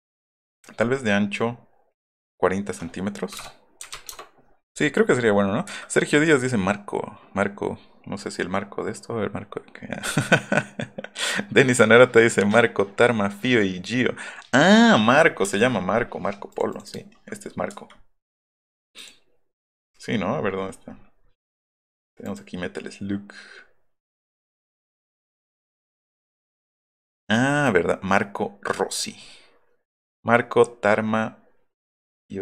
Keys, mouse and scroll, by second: 0.8 middle click, 3.9 KP_4, 5.6 Escape, 15.1 middle click, 15.3 middle click, 15.4 space, 16.5 click, 16.7 click, 17.0 middle drag, 17.6 Escape, 18.9 middle click, 18.9 click, 19.8 click, 22.2 click, 24.9 middle click, 24.9 scroll up 2.